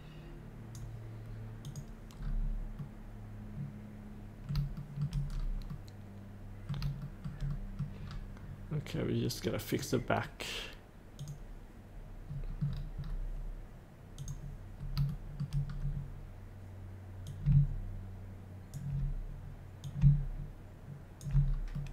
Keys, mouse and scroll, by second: 2.2-2.8 scroll up 1, 2.8-4.5 middle drag, 4.7 shift+middle click, 5.3-5.7 scroll up 1, 5.7 middle click, 7.5 middle click, 8.0-9.7 scroll down 1, 9.7 click, 12.2 click, 12.3 scroll down 1, 14.1 click, 14.8 scroll up 1, 15.0 shift+middle click, 15.6 scroll down 1, 17.3 click, 18.1 click, 21.4 scroll up 1, 21.7 middle click.